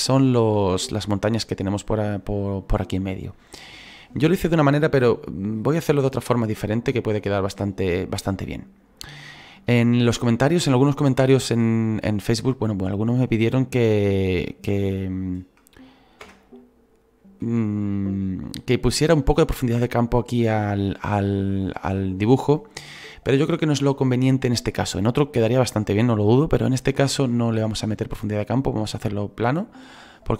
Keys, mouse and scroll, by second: 0.0-3.2 drag, 3.2-6.6 scroll down 2, 6.6-10.9 shift+middle drag, 10.9-11.9 scroll down 3, 11.9-12.6 scroll up 4, 12.6-16.2 shift+middle drag, 16.2 /, 17.0 scroll down 3.